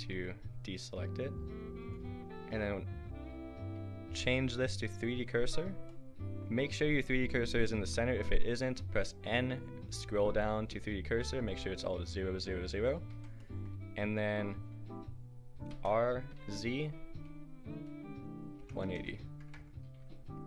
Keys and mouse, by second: 1.8-7.8 drag, 7.8 n, 9.6-13.1 drag, 13.1 n, 14.9 click, 15.7 r, 20.0 a.